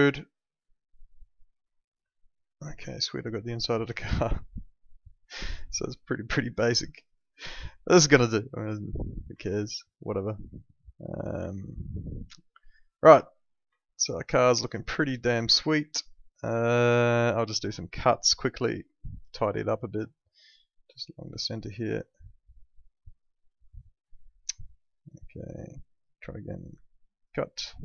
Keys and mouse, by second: 2.9 alt+middle click, 7.0 click, 8.7 click, 9.4 alt+middle click, 12.1 alt+middle click, 14.1 alt+middle click, 15.3 alt+middle click, 18.6 click, 23.7 right click, 25.8 click.